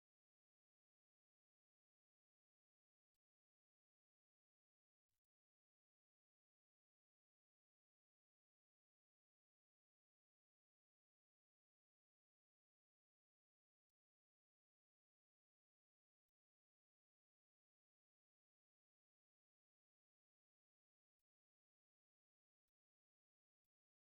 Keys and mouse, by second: 0.8 shift+right click, 1.4 x, 2.3 x, 2.8 right click, 5.0 alt+right click, 6.1 w, 8.2 middle click, 10.0 shift+middle click, 10.5 middle click, 11.3 right click, 11.7 alt+right click, 15.1 middle click, 16.8 middle click, 19.6 shift+middle click, 20.4 middle click, 20.6 middle click, 22.9 right click, 23.4 right click.